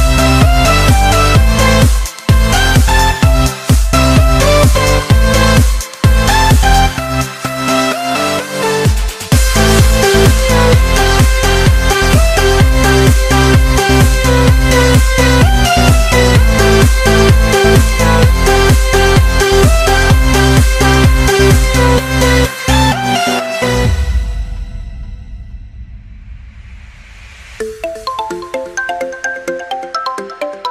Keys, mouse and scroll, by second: 1.4 Tab, 1.8-2.3 scroll down 1, 2.4 Tab, 2.8 click, 3.2-3.6 scroll down 1, 3.6-5.0 middle drag, 5.0 click, 5.3-6.7 right drag, 6.7-7.3 scroll down 2, 7.3-8.4 middle drag, 8.4 click, 8.9 click, 9.6 shift+click, 11.0 ctrl+j, 11.9 KP_1, 13.4 click, 19.9 click, 20.5 click, 21.3 click, 21.9 click, 24.3 click, 25.1 Tab, 26.0 Tab, 27.1 click, 28.9 click, 29.8 KP_0.